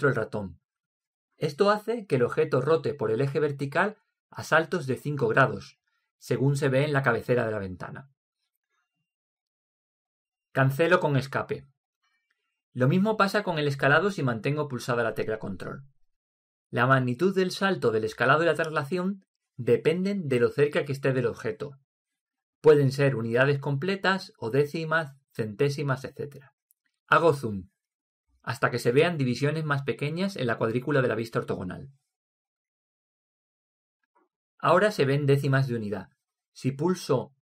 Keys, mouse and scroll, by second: 27.7-31.7 middle drag.